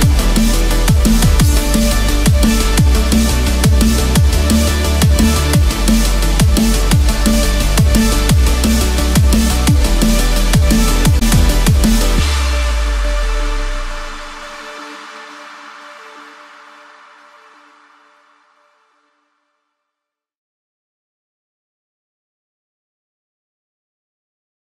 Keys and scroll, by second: 3.5 ctrl+-, 5.6 ctrl+z, 13.2 ctrl+-, 17.2 ctrl+-, 18.0 ctrl+=, 19.3 ctrl+=, 22.4 ctrl+-.